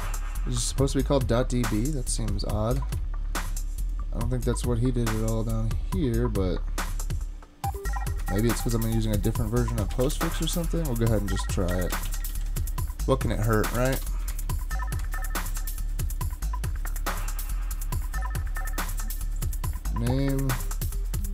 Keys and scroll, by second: 2.2 super+Tab, 2.8 super+Tab, 8.2 super+Tab, 9.7-12.6 typing, 13.9 Return, 14.3 super+Tab, 15.0 super+Tab.